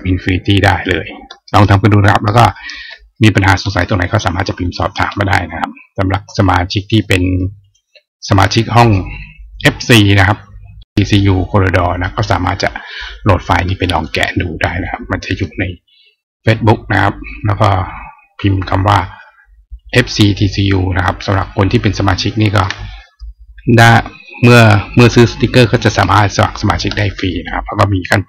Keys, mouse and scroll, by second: 7.4 click, 13.7 click, 19.5 click.